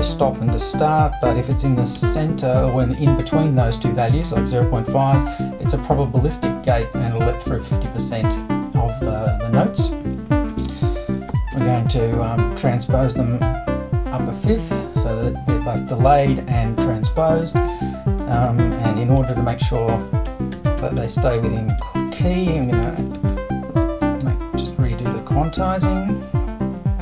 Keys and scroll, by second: 1.0-2.5 typing, 10.0 super+i, 11.3 shift+=, 11.5 shift+space, 12.0 7, 17.7 super+`, 18.8 BackSpace, 19.2 super+i, 20.0-25.1 typing.